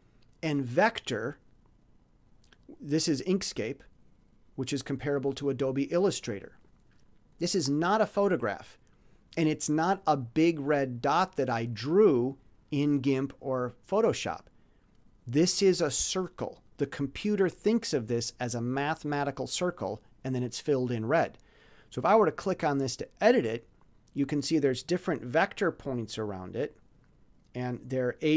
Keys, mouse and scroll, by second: 0.3 click, 12.4 click, 14.2 click, 22.4 scroll up 1.